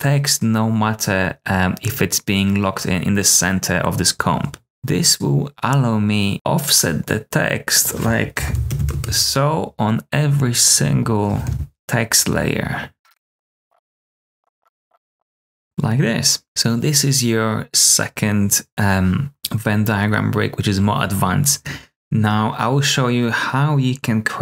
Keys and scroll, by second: 4.7 Tab, 8.1-9.2 typing, 11.4 super+f, 11.7 typing, 12.9 super+z, 13.3 super+z, 13.4-15.6 typing.